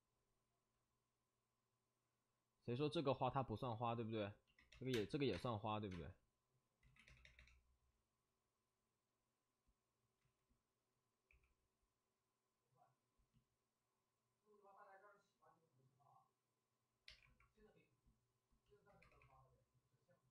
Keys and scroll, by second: 4.9 3, 4.9 space, 5.3 space, 6.8 ctrl+z, 6.8 space, 10.1 ctrl+z, 10.1 3, 11.2 w, 18.9 2, 19.1 2.